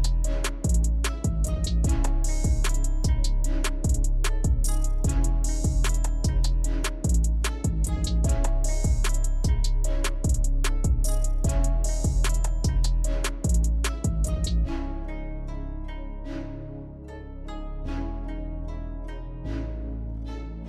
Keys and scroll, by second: 17.0 ctrl+z.